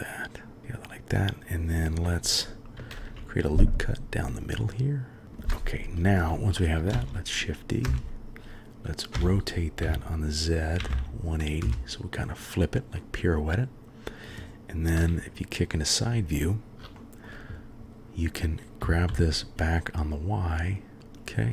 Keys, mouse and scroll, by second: 2.7 ctrl+r, 6.9 shift+d, 9.1 r, 12.9-13.4 drag, 15.0 KP_3, 17.0 shift+middle drag, 18.8 g, 21.2-21.5 drag.